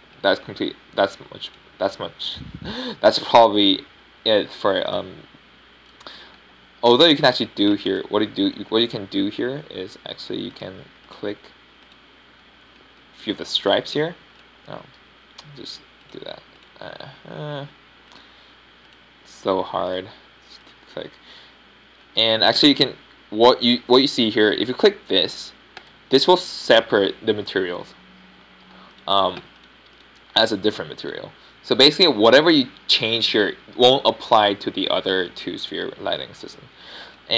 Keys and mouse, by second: 3.4 middle click, 11.0 z, 11.6 z, 16.9 z, 19.5 z, 34.0 g.